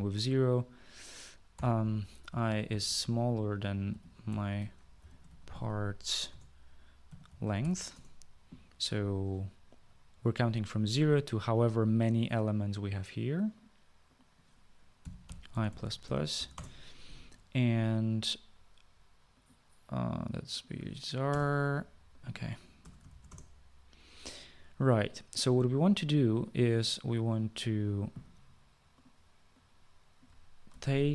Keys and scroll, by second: 1.6 typing, 2.8 typing, 4.0-8.2 typing, 6.4 Return, 14.8-16.4 typing, 16.6 Return, 21.4 BackSpace, 22.9 BackSpace, 23.2 {, 23.4 Return, 30.1 typing, 30.8 ctrl+c.